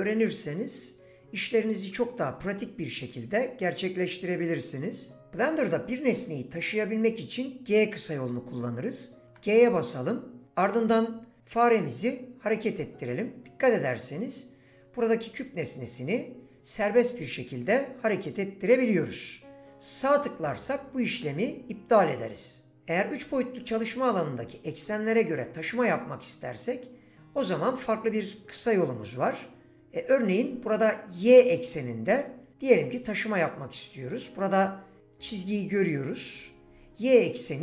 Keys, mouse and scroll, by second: 9.3 g.